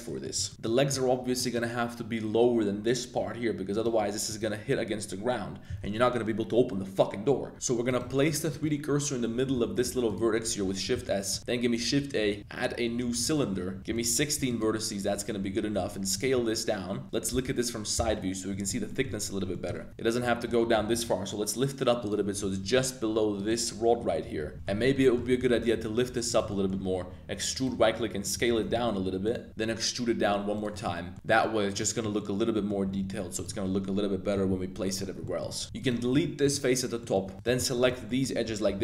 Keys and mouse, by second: 0.0 middle click, 0.4 shift+click, 0.6 middle click, 1.3 middle click, 3.7 click, 4.2 click, 7.5 Tab, 7.8 click, 8.5 middle click, 9.5 shift+s, 10.8 Tab, 11.1 shift+click, 11.4 shift+a, 13.9 click, 15.0 Tab, 15.5-20.9 typing, 18.8 shift+click, 18.9 shift+middle click, 19.5 shift+click, 22.0 click, 22.4 g, 22.7 y, 23.4 click, 24.5 g, 24.5 shift+click, 24.5 shift+KP_1, 25.0 shift+click, 25.4 g, 25.5 z, 26.3 click, 26.4 shift+middle click, 26.9 e, 27.5 click, 27.7 s, 28.2 click, 28.7 shift+z, 29.2 click, 29.5 e, 30.5 click, 30.7 z, 30.8 middle click, 31.2 middle click, 31.7 middle click, 32.2 middle click, 32.8 g, 33.0 z, 33.3-34.7 drag, 34.8 middle click, 35.2 middle click, 35.5 z, 35.6 1, 35.7 alt+click, 36.1 x, 37.0 click, 37.2 2, 37.3 alt+shift+click, 37.7 alt+shift+click, 38.0 z, 38.1 click, 38.6 super+b.